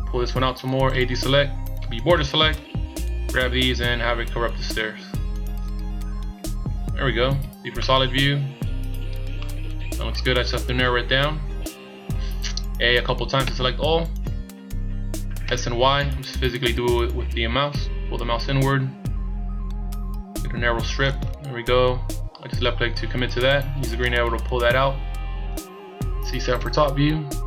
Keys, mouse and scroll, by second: 1.0 a, 1.8 b, 3.3 click, 6.0-6.4 scroll down 2, 6.8 scroll down 1, 7.4 z, 7.8 middle click, 9.4 middle click, 13.0 a, 13.4 a, 15.5 s, 23.9 click, 25.9 scroll up 2, 26.5 KP_7.